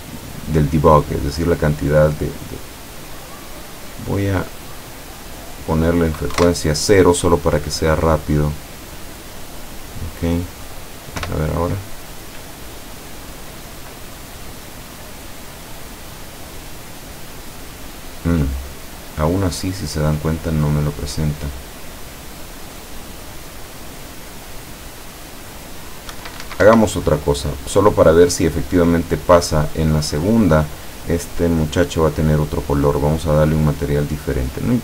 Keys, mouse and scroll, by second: 3.2-4.0 middle drag, 5.0 click, 5.5 click, 6.4 KP_0, 8.0 click, 9.1-11.0 middle drag, 11.3 p, 20.0-20.6 scroll down 4, 21.1 scroll up 2, 26.2 Escape, 27.7 click, 28.4 click, 29.1 right click, 31.5 click, 32.4 click, 33.7 click, 34.6 click.